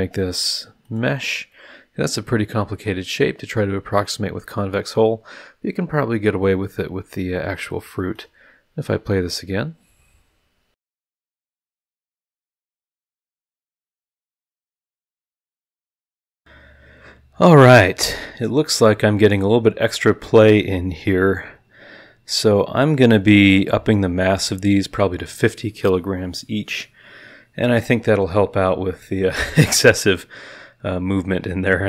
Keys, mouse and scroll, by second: 0.8 click, 1.5 click, 1.5-3.2 middle drag, 3.4 scroll down 1, 4.3-4.7 scroll up 2, 4.9 scroll down 2, 8.1 click, 11.1 click, 11.5 click, 11.8 middle click, 13.1 click, 13.4 Return, 13.9 click, 14.0 click, 16.3 click, 16.4 click.